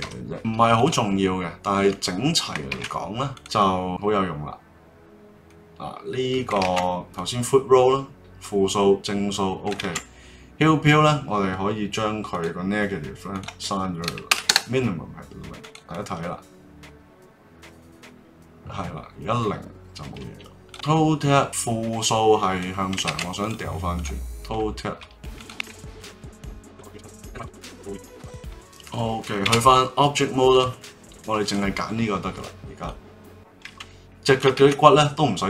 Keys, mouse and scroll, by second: 0.7 click, 2.7 ctrl+Tab, 3.6-5.8 drag, 6.6 ctrl+z, 7.1-9.8 drag, 9.8 ctrl+z, 12.3-15.3 drag, 15.9-18.9 drag, 20.6 click, 23.0 ctrl+z, 23.4 click, 23.9 click, 25.3 click, 25.5 Tab, 26.1 right click, 26.6 click, 26.8 click, 27.0 right click, 28.3 click, 28.4 Tab, 28.4 click, 29.4 ctrl+Tab, 31.4 click, 32.8-34.6 drag, 34.6 ctrl+z, 35.0-35.4 drag.